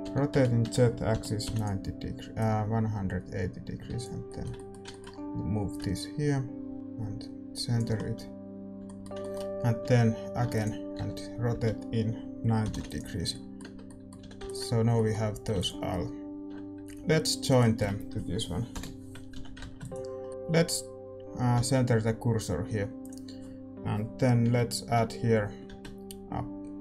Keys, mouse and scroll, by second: 0.0 r, 2.3-4.2 drag, 4.2-5.7 middle drag, 5.7-8.1 drag, 7.9 middle click, 8.1 a, 8.6 a, 8.8-11.0 middle drag, 10.4 shift+d, 11.0 r, 13.3 middle click, 13.6 Tab, 14.1 a, 14.6 ctrl+s, 17.4-19.3 right drag, 18.7 ctrl+j, 19.3 a, 20.2 ctrl+s, 23.0 shift+s, 24.8 a.